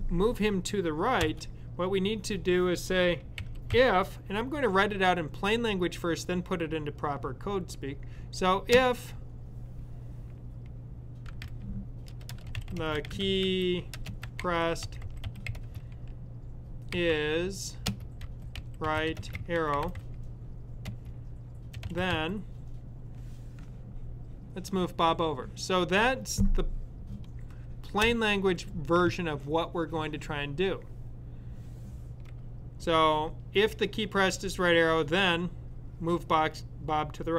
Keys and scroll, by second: 11.1-22.5 typing.